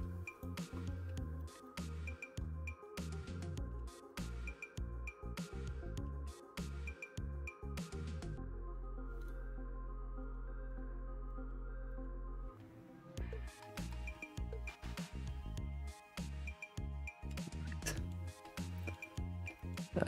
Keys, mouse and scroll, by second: 0.1-0.5 scroll down 4, 0.5 middle click, 0.8 scroll up 3, 1.4 alt+middle click, 1.7 middle click, 2.1-2.7 scroll up 6, 2.7-3.8 middle drag, 3.8 alt+shift+z, 4.1-5.3 shift+middle drag, 5.3 scroll up 2, 5.5-6.5 middle drag, 6.5 scroll down 1, 6.8 alt+shift+z, 7.1-8.8 middle drag, 8.8 click, 9.3 drag, 10.2 click, 10.8 click, 11.3 shift+middle click, 13.2 middle click, 13.9-16.5 alt+shift+middle drag, 17.2-17.8 middle drag, 17.9-18.9 middle drag, 19.1 alt+middle click, 19.6 shift+middle click, 20.0 scroll.